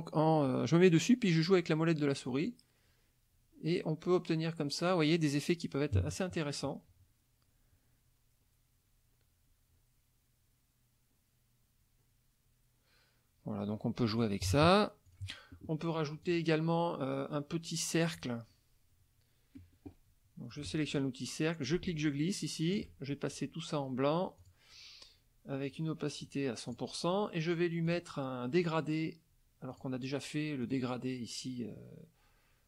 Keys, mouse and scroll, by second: 1.3 scroll down 1, 2.1 scroll down 1, 2.8 scroll down 1, 3.4 scroll down 1, 4.0 scroll down 1, 8.3 scroll down 2, 9.6 scroll down 2, 10.3 scroll down 2, 10.9 scroll down 2, 11.8 scroll down 2, 13.3-14.0 scroll up 4, 14.1 click, 15.1 click, 16.2 click, 20.5 click, 21.6-23.0 ctrl+drag, 24.4 click, 26.2 right click, 26.7 click, 27.9 click, 29.7 click, 30.6 click.